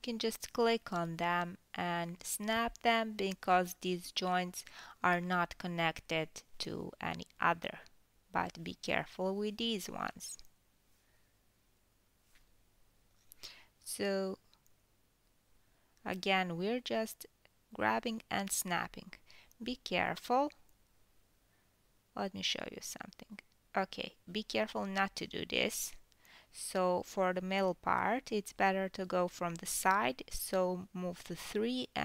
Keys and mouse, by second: 0.3-4.2 middle drag, 1.2 g, 4.2 click, 4.3 middle click, 4.7 g, 6.5 click, 7.0 g, 8.9 click, 10.9-13.3 drag, 11.7 g, 14.0-16.5 drag, 16.5-17.1 ctrl+middle drag, 17.1-19.5 drag, 18.1 g, 19.5-21.0 middle drag, 21.0-32.0 drag, 22.3 f, 25.7 g, 28.3 `, 30.7 KP_3.